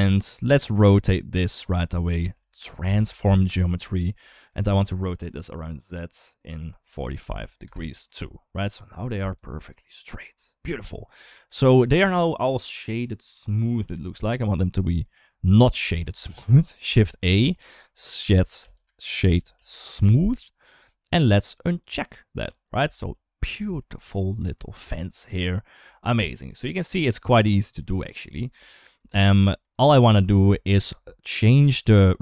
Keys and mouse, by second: 0.8 click, 2.2 shift+a, 4.2 shift+middle click, 5.2-6.7 drag, 6.7 click, 8.4 middle click, 9.4 middle click, 11.1 middle click, 11.4 middle click, 12.2-13.7 middle drag, 14.6 middle click, 15.2 click, 16.0 g, 16.8 shift+a, 21.6 click, 22.5 right click, 23.2 ctrl+s, 23.6 shift+middle click, 23.9 shift+middle click, 24.4 shift+middle click, 25.7 shift+middle click, 26.1 middle click, 27.0 middle click, 27.6 middle click, 29.4 shift+middle click, 30.0 shift+middle click.